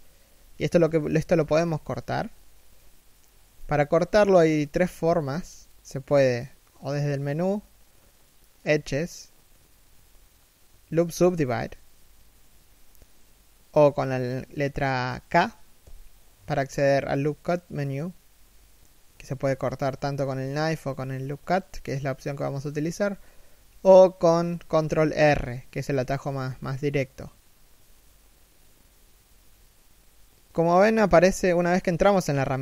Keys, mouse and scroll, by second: 15.4 k, 24.7 ctrl+r.